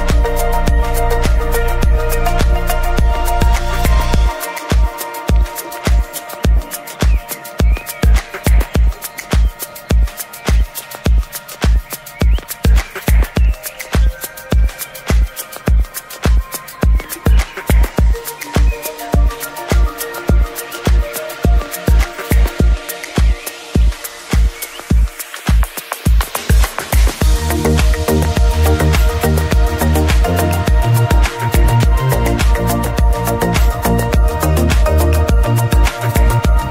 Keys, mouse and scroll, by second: 0.1 scroll down 1, 4.5 ctrl+shift+click, 6.8-10.7 middle drag, 10.7-13.0 drag, 13.0-14.5 scroll up 2, 14.5-15.2 scroll up 1, 15.2 ctrl+shift+click, 17.5-19.3 scroll up 2, 19.3-22.0 drag, 22.0 scroll down 2, 22.3-23.0 middle drag, 23.0 scroll down 2, 23.2-23.5 shift+middle drag, 23.5-25.2 scroll up 2, 25.2-27.0 drag, 27.0-27.4 scroll down 2, 27.4-28.0 middle drag, 28.0 scroll down 2, 28.2-28.7 middle drag, 28.7-29.5 scroll up 2, 29.5-29.9 shift+middle drag, 29.9-34.0 scroll up 2, 34.0-35.0 scroll down 2, 35.0-35.8 middle drag, 35.8-36.5 scroll up 2, 36.5-36.7 scroll up 1.